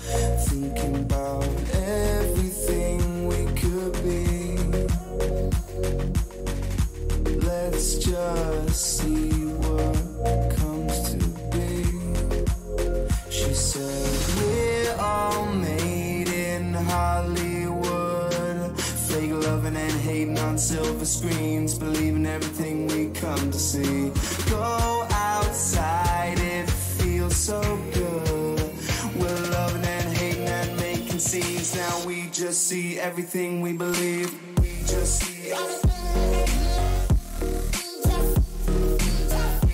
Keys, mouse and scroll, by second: 0.4-5.1 middle drag, 7.3-11.5 middle drag, 12.6-14.9 drag, 13.7-15.7 middle drag, 13.7-14.9 right drag, 18.0 ctrl+KP_7, 27.9-30.1 middle drag, 30.8 middle click, 32.1 a, 32.4 a, 33.3-35.3 right drag, 34.4-36.5 drag, 37.5 a, 38.1-39.7 right drag, 38.9-39.7 drag.